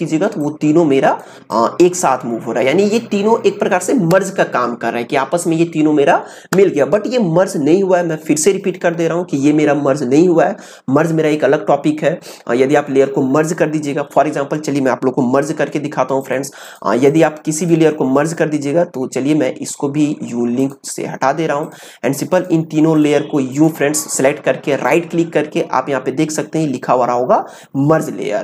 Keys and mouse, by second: 16.2 click, 20.6 click, 24.6 right click.